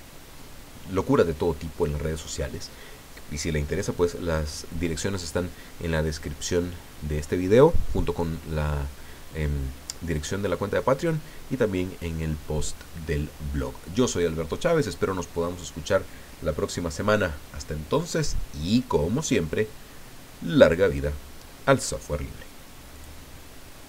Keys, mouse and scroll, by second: 22.9 click.